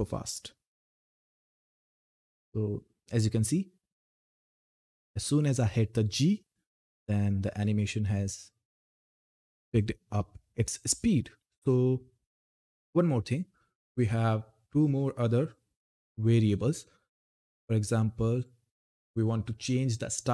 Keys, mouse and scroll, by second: 0.8 g, 13.6 click.